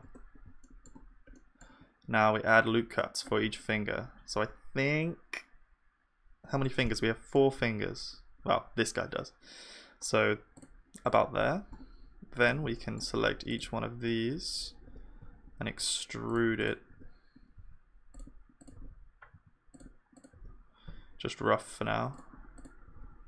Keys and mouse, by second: 0.0 Tab, 1.5-3.4 middle drag, 2.0 ctrl+r, 6.8 click, 6.8-11.0 middle drag, 6.8-11.0 right drag, 7.8 ctrl+r, 12.7-15.5 drag, 12.7-14.8 middle drag, 12.9-14.8 right drag, 14.8 e, 16.6-18.1 drag, 16.6 e, 16.9 e, 18.6-19.7 drag, 18.6 e, 18.7 e, 20.2-22.1 drag, 20.2 e, 20.3 e, 22.6 click, 22.6 e, 22.8 e.